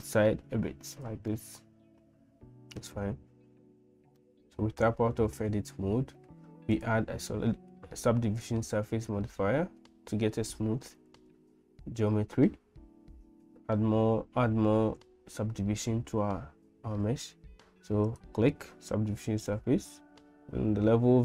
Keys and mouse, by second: 1.5-3.1 middle drag, 3.6 Tab, 4.2 middle click, 6.7-18.5 drag.